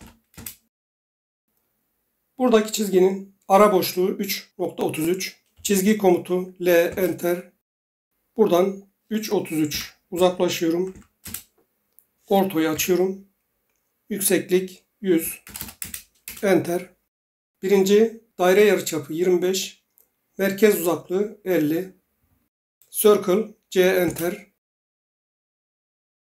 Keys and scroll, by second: 0.3 Return, 5.5 l, 6.8 Return, 9.7-10.9 typing, 11.2 Return, 12.7 F8, 14.9-15.7 typing, 15.8 Return, 16.2 Return, 22.5 c, 24.0 Return.